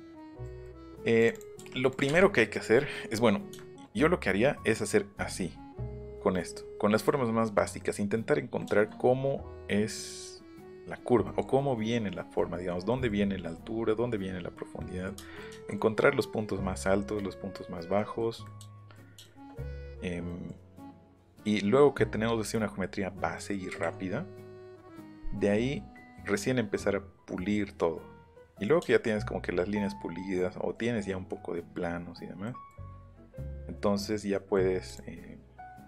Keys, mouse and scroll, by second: 0.3 click, 0.7 middle click, 0.9 middle click, 1.1 click, 1.9 click, 2.1 Up, 2.5 click, 2.7 middle click, 3.1 middle click, 3.6 shift+middle click, 7.8 middle click, 8.6 middle click, 11.2 middle click, 12.3 middle click, 15.5 shift+middle click, 18.0 middle click, 18.4 middle click, 19.2 shift+middle click, 20.3 middle click, 23.4 middle click, 28.5 middle click, 28.8 shift+middle click, 32.4 middle click, 34.3 middle click, 34.9 click.